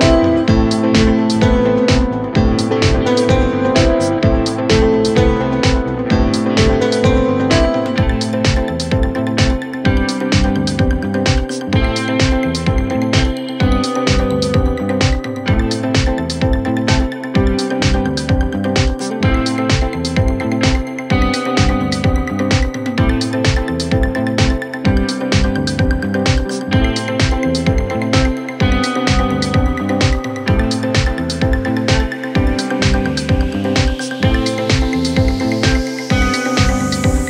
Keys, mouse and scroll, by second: 0.0-0.7 scroll down 13, 1.8-2.9 scroll down 4, 4.7 scroll up 4, 5.0-5.3 scroll down 10, 6.8-7.5 scroll up 12, 7.9-8.4 scroll down 11, 8.4 space, 9.0 scroll up 1, 9.2 scroll down 1, 9.4-9.7 scroll up 8, 11.0-11.8 scroll down 4, 12.0 scroll down 5, 12.2 scroll up 4, 21.4 space, 25.1 ctrl+click, 25.3 ctrl+shift+Right, 25.7 typing, 27.9-29.9 typing, 31.3 middle click, 31.6 scroll down 11, 32.1 scroll up 1, 32.2-33.4 typing, 32.9 scroll up 7, 33.1 middle click, 33.6 scroll up 1, 33.7 middle click, 34.1 middle click.